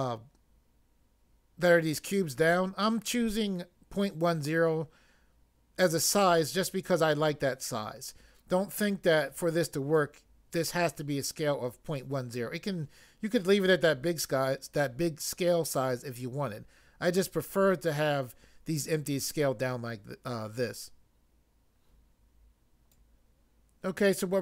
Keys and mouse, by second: 22.9 click.